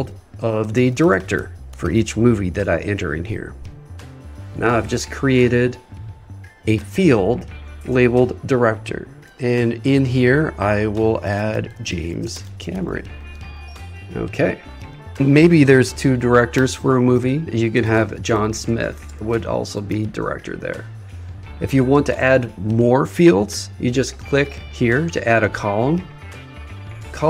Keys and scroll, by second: 0.8 shift+d, 11.4 shift+j, 12.3 shift+c, 17.8 shift+j, 19.1 shift+s.